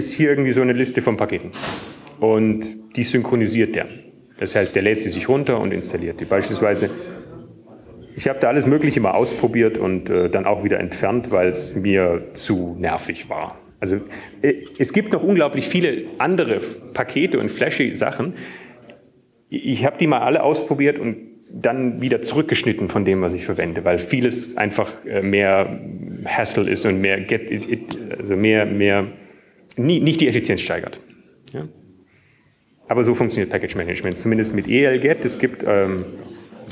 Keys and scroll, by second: 1.4 Up, 2.1-4.5 typing, 5.6 typing, 7.6-8.4 typing, 10.4-11.5 typing, 16.2 typing, 16.9 Down, 17.8 Down, 18.9 Down.